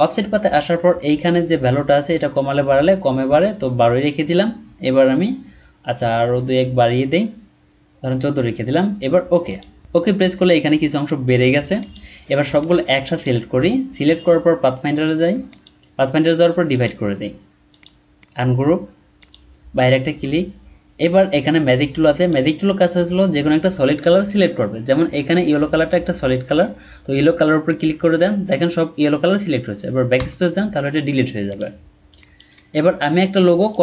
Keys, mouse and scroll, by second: 2.3 Up, 3.2 Down, 5.9 Up, 6.3 Up, 18.1 right click, 30.2 BackSpace, 32.5 BackSpace.